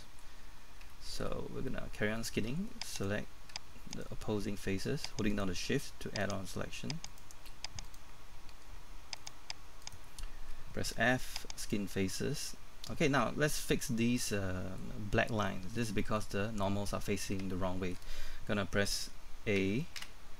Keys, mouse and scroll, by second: 1.4 scroll up 1, 1.7 middle click, 2.9 right click, 3.9 shift+right click, 9.2 shift+right click, 11.6 click, 12.1-12.4 scroll down 1, 12.4 middle click, 14.0 scroll down 1, 14.2 middle click, 17.1-17.4 scroll up 1, 17.4-19.6 shift+scroll, 19.6-20.0 typing.